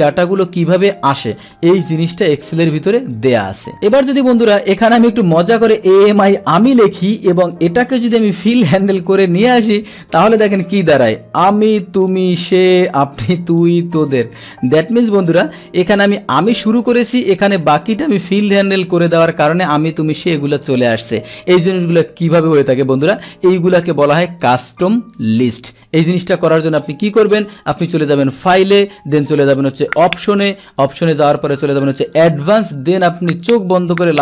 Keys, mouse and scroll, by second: 0.0-1.1 drag, 2.1 Delete, 3.1 click, 3.8 click, 6.5 Return, 7.4 click, 8.4-10.2 drag, 11.5 click, 12.0 click, 12.5 click, 12.9 click, 13.4 click, 13.9 click, 14.7 click, 15.8 Delete, 16.1 click, 16.3 Delete, 17.0 click, 17.5 click, 18.2 click, 26.9 Delete, 28.1 click, 29.9 click, 32.1 click, 33.4-34.2 drag.